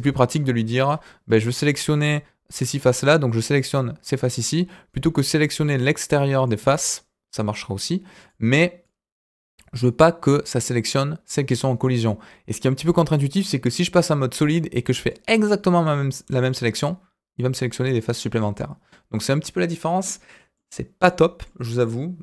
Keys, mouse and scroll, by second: 0.5 KP_1, 1.2-2.8 scroll up 3, 2.8 click, 4.0 scroll down 1, 4.9-6.5 drag, 8.1 click, 8.8-10.0 drag, 13.9 click, 15.0-16.5 drag, 19.6-20.0 scroll down 2, 20.0 middle click, 20.8 scroll down 1, 21.0 middle click, 21.7 click.